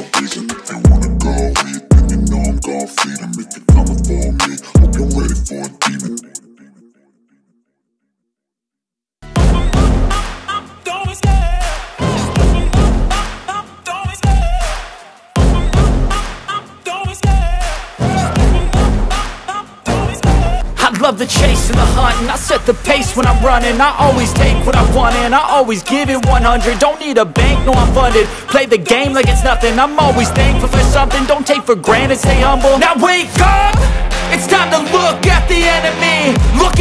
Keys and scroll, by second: 0.4 F4, 0.8 F2, 1.1 F3, 10.4 ctrl+z, 17.3 space, 17.8 F3, 20.8 ctrl+r, 21.9 ctrl+r, 22.8 ctrl+r, 24.2 Delete.